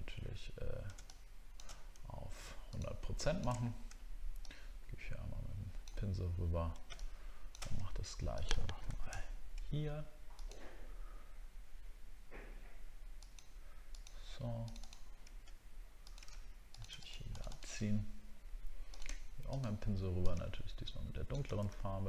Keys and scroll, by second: 8.9 ctrl+d, 9.2 alt+scroll up 2, 21.7 ctrl+d.